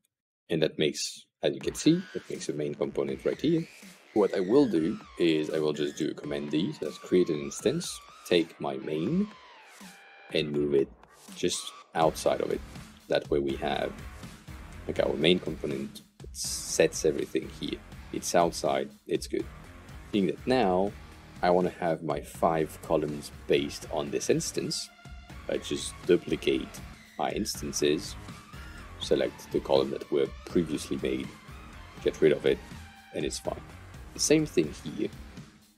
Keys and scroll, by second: 5.9 super+d, 25.1 super+d, 30.9 Delete.